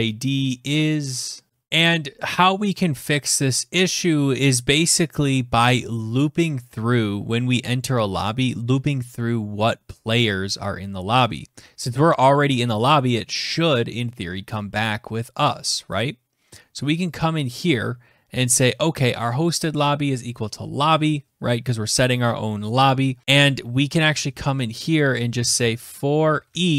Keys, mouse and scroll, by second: 1.7 click, 1.7-2.0 scroll, 1.7 BackSpace, 2.5 scroll, 7.5-8.7 scroll, 11.4 click, 11.7-12.6 scroll, 16.6 click, 17.1 click, 18.0 click, 23.6 Return, 24.6-26.6 typing.